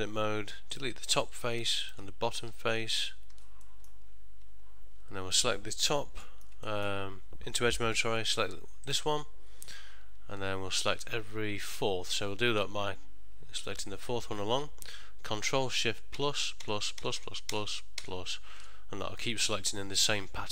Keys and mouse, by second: 0.3 3, 0.8 click, 1.2 middle click, 1.9 shift+click, 2.6 x, 3.8 middle click, 5.1 1, 5.1 2, 6.4 ctrl+middle click, 6.5 ctrl+middle click, 6.8 shift+middle click, 8.1 2, 9.0 click, 13.7 shift+click, 16.3 ctrl+shift+KP_Add, 16.7-18.7 ctrl+shift+KP_Add.